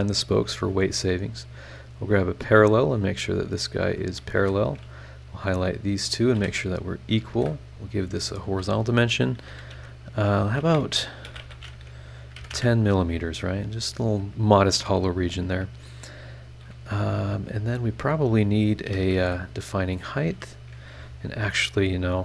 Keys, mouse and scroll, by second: 0.6 Escape, 1.7 click, 2.8 click, 3.9 click, 4.3 Escape, 4.9 click, 5.3 click, 6.1 click, 6.3 e, 7.3 shift+h, 7.9 shift+click, 9.5 KP_6, 9.7 KP_Decimal, 10.7 BackSpace, 12.4 KP_1, 12.4 KP_0, 12.5 KP_Enter, 19.1 shift+v, 19.8 click, 21.7 click.